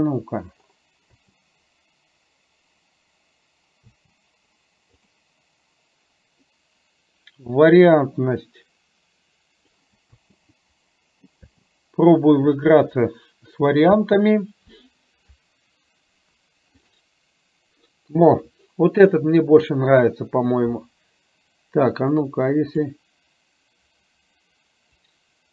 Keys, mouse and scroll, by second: 1.2 space, 4.0 space, 5.1 click, 8.0-9.7 drag, 10.1 space, 11.5 space, 12.7-13.7 drag, 14.1 space, 22.2 click, 25.2 click.